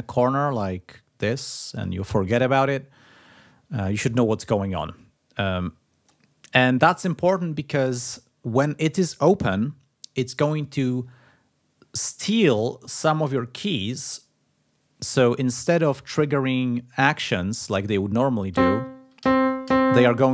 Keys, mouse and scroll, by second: 0.6-1.9 drag, 4.6-6.2 drag, 16.9 click, 17.6 click, 18.4 a, 19.1 a.